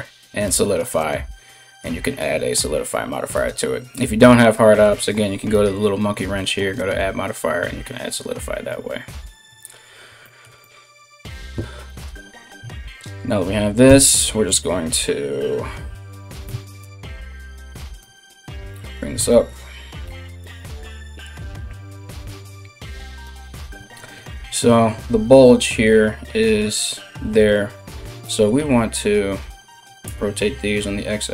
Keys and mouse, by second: 5.1 click, 5.3 middle click, 5.9-18.5 drag, 11.9 middle click, 11.9 right click, 12.2 Tab, 13.4 Tab, 16.0 Tab, 16.4 KP_3, 17.6 g, 18.5-31.3 shift+middle drag, 19.6 r, 20.1 r, 27.8 r.